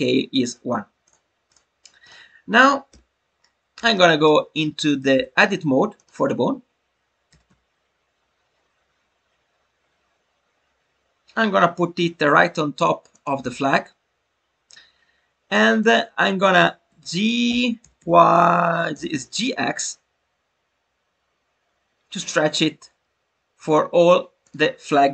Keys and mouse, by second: 1.0 click, 1.4-2.8 drag, 2.8 n, 3.9 shift+middle drag, 4.7 shift+middle click.